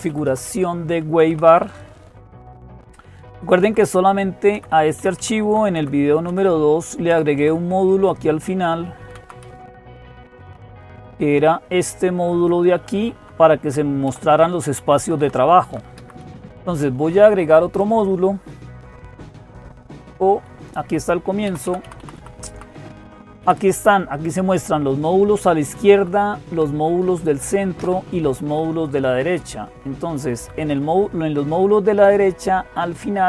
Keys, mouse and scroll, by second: 0.2 Up, 0.3 Up, 0.9 Down, 1.0-1.8 typing, 3.2-3.9 typing, 4.3 Page_Down, 4.8 Page_Down, 5.0 Page_Down, 5.2 Page_Down, 6.1 Page_Down, 8.9 Up, 8.9 Down, 8.9 Page_Down, 9.9-11.4 Up, 10.7 Down, 11.8 Up, 12.0 Up, 12.1 Up, 12.6 Down, 13.0 Down, 13.2 Down, 13.4 Down, 13.9 Up, 14.6 Down, 14.8 Down, 15.0 Down, 15.2 Down, 15.4 Down, 15.8 Up, 16.0 Up, 16.5 Down, 17.2 Down, 18.5 Down, 18.5-19.9 Page_Up, 19.2 Up, 19.2 Down, 19.2 Page_Up, 21.3 Down, 21.3 Page_Up, 21.5 Down, 21.8 Down, 22.0 Down, 22.3 Down, 22.8 Up, 23.2 Down, 24.9-25.8 Right, 26.0 Right, 26.8 Down, 27.6 Down, 28.9 Down, 28.9 Right, 29.5 Right, 29.7 Right, 30.2 Right, 30.4-32.9 Right, 32.9 Down, 32.9 Up, 32.9-33.2 Right.